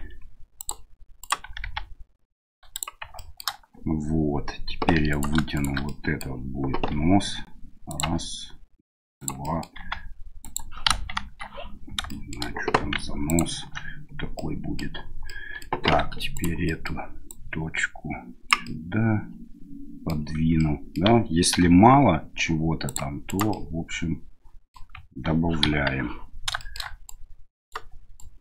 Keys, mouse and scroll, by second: 1.2 right click, 1.4 g, 3.3 shift+middle click, 5.0 3, 5.1 right click, 5.5 shift+right click, 5.9 middle click, 6.9 e, 8.1 e, 9.4 middle click, 9.8 s, 10.9 KP_1, 11.2 KP_3, 12.1 shift+middle click, 13.3 ctrl+click, 14.3 middle click, 15.2 middle click, 15.9 1, 16.3 right click, 16.6 middle click, 17.3-18.5 drag, 18.6-20.1 middle drag, 20.6 middle click, 21.5 ctrl+r, 23.5-24.7 middle drag, 25.6 KP_1, 26.6 middle click, 27.0 right click, 28.2 right click.